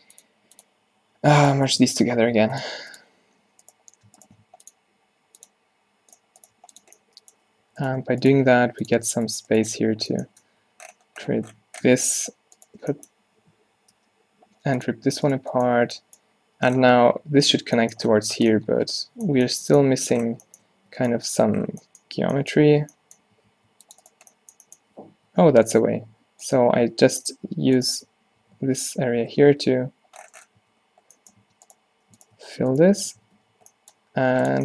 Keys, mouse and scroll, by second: 1.2 g, 1.8-3.7 drag, 2.3 w, 4.0 click, 4.5 w, 6.6 g, 7.7 z, 8.6 g, 9.3 shift+click, 9.8 f, 10.3 Tab, 10.7 z, 11.9 Tab, 14.0 v, 15.3-17.3 drag, 17.4 click, 23.6 ctrl+r, 25.2-29.6 typing, 30.7 Tab, 31.5 Tab, 32.5 g, 33.1-33.5 q, 33.6 q, 34.1 g.